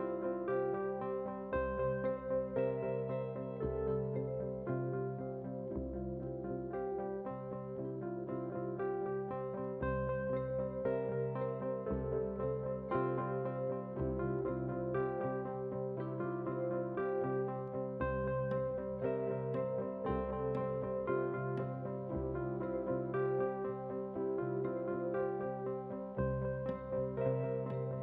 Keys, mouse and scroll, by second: 0.3 ctrl+r, 1.4 s, 3.0 alt+click, 3.6 alt+shift+click, 4.0 s, 5.1 ctrl+b, 6.5 scroll down 1, 6.6 middle drag, 7.1 KP_7, 7.7 alt+click, 8.3 r, 11.4 s, 12.6 middle click, 13.0 shift+middle click, 13.2 click, 13.3 scroll up 2, 13.5 shift+middle drag, 13.9 alt+click, 14.4 e, 15.6 middle click, 15.9 shift+middle click, 16.6 alt+click, 17.5 alt+click, 18.0 e, 19.2 g, 20.1 scroll down 1, 20.3 middle drag, 20.5 shift+middle click, 20.8 middle drag, 21.2-21.5 middle drag, 22.1 middle drag, 22.8 alt+click, 23.1 KP_1, 23.6 s, 25.2 click, 25.4 scroll down 1, 25.6 middle click, 26.8 click, 27.5 drag.